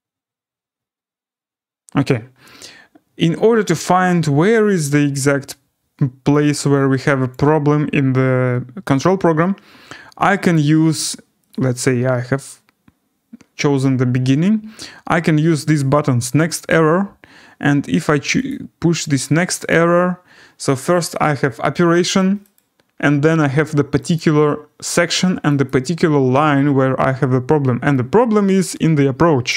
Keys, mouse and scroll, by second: 7.3 click, 10.5 click, 11.5 click, 16.5 click, 18.4 click, 19.7 click, 22.5 click, 24.1 click, 25.6 click, 26.8 scroll down 3, 27.5 scroll.